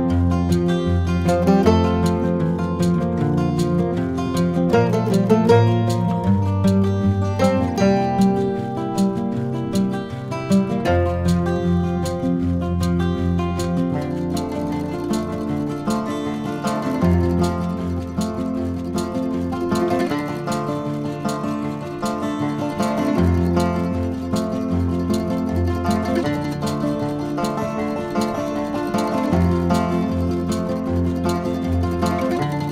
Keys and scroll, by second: 3.8 ctrl+-, 6.2 ctrl+z, 6.4 ctrl+c, 6.6 ctrl+v, 9.2 ctrl+KP_Add, 9.8 ctrl++, 12.3 ctrl++, 12.9 ctrl+KP_Add, 13.0 ctrl++, 28.8 ctrl+z.